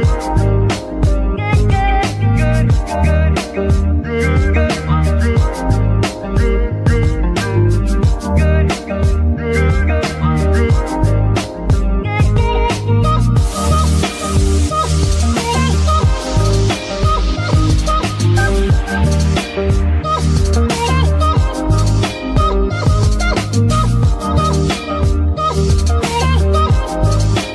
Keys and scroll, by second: 0.1 Escape, 1.3 g, 2.2 Escape, 2.6 g, 2.8 g, 5.1 alt+r, 5.8 g, 7.9 g, 9.1 Escape, 10.1 g, 12.9 Escape, 13.6 g, 17.4 Escape, 18.6 g, 19.1 Escape, 21.9 g, 22.0 g, 22.7 Escape, 23.1 r, 23.2 r.